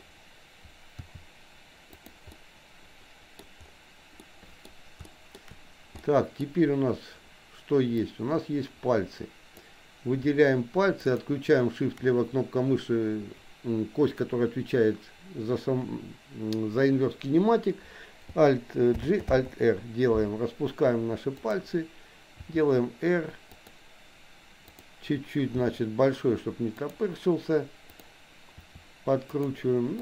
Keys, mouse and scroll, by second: 1.0 r, 2.3-3.4 middle drag, 3.4-3.9 scroll down 1, 4.2 middle click, 5.2 shift+middle click, 6.0 middle click, 6.4-6.9 scroll down 1, 8.0-9.8 drag, 11.0 shift+click, 19.0 alt+g, 19.3 alt+r, 21.4 click, 22.5 r, 24.7 click, 25.7 r, 27.9 click, 28.5 r.